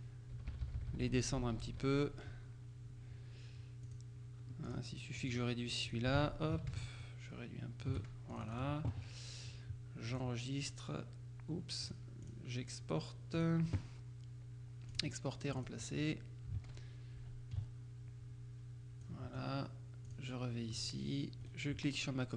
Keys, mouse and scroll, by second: 0.4 Down, 3.9 click, 4.7 click, 5.4 click, 6.2 ctrl+click, 6.2 ctrl+a, 7.1-8.4 shift+drag, 8.5 shift+click, 10.2 click, 11.9 click, 13.4 click, 15.0 click, 15.7 click, 16.7 alt+Tab, 19.1 click, 20.2 click, 21.5 right click.